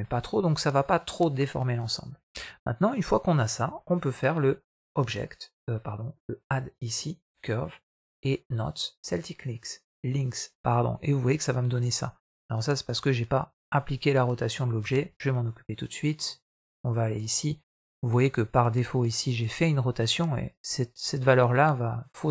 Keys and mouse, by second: 4.7-5.3 drag, 6.4-9.1 drag, 10.8-12.1 middle drag, 14.7 x, 16.1 middle drag, 19.0 click.